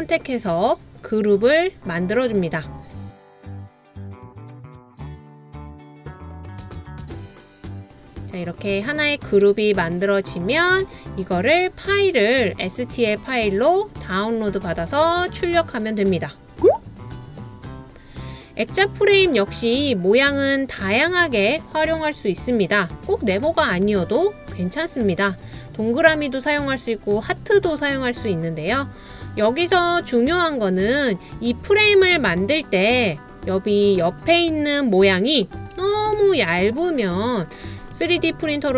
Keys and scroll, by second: 35.9 super+c, 36.2 super+v.